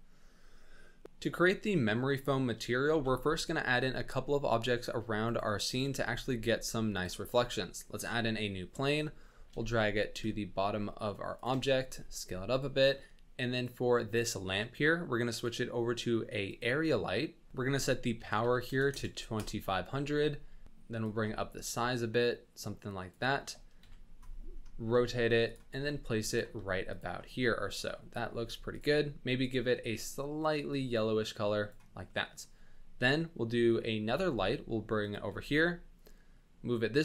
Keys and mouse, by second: 2.9 shift+a, 5.9 s, 8.1 KP_1, 9.4 g, 11.9 s, 17.5-19.3 drag, 18.9 KP_0, 21.1-23.1 shift+drag, 23.7 KP_1, 24.9 r, 25.7 g, 26.5 r, 27.2-28.2 middle drag, 28.4 r, 29.4 click, 32.1 middle click, 32.9 KP_7, 34.2 shift+d, 35.3 r.